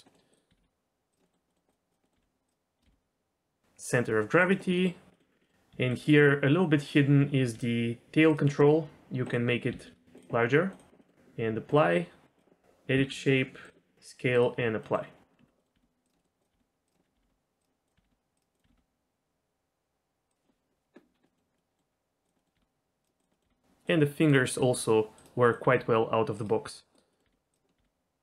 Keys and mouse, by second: 0.0 middle click, 0.5 r, 0.5 r, 1.2 middle click, 1.5 middle click, 1.7-2.0 drag, 2.0 middle click, 2.1 r, 2.4 right click, 2.8 g, 4.4-4.7 right drag, 4.7 middle click, 5.1 middle click, 5.4 middle click, 5.7 z, 6.0 middle click, 7.4 r, 8.5 middle click, 9.7 s, 10.1 click, 10.7 click, 11.0 middle click, 12.9 s, 13.6 click, 14.8 middle click, 15.4-18.7 typing, 15.6 middle click, 16.2 click, 16.2 right click, 16.8 click, 18.5 click, 21.2 middle drag, 21.5 middle drag, 22.3 middle click, 22.5 r, 23.3 middle click, 23.4 r, 24.6 r, 25.1 click, 25.6 r, 26.3 click, 27.2 r, 27.7 r.